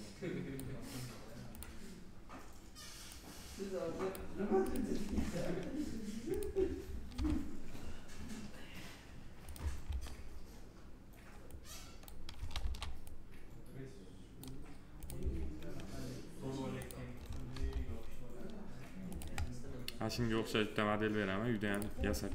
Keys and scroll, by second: 6.9 alt+r, 12.4 ctrl+z, 17.3 alt+r.